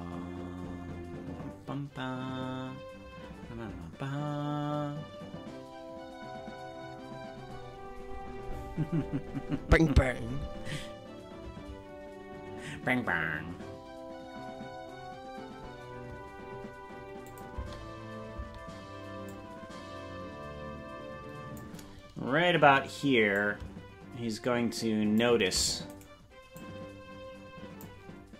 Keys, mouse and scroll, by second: 17.3 click, 17.5 space, 18.4 space, 19.3-21.7 drag, 23.3-25.2 drag, 25.9 right click, 26.5-27.8 drag.